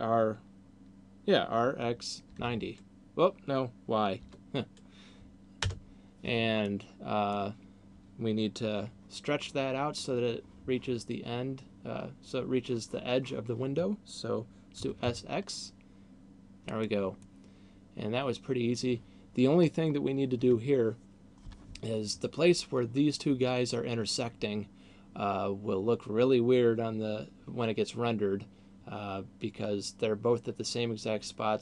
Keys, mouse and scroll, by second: 6.6 middle click, 14.6 s, 16.9 click, 17.4 middle click, 19.6-20.1 scroll up 2.